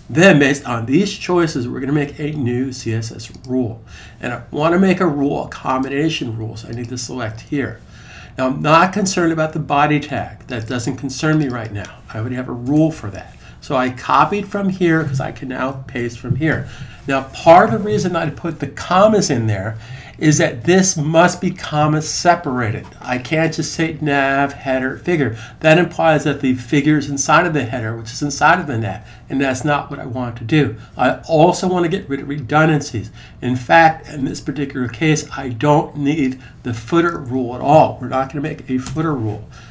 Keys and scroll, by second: 15.7 super+v.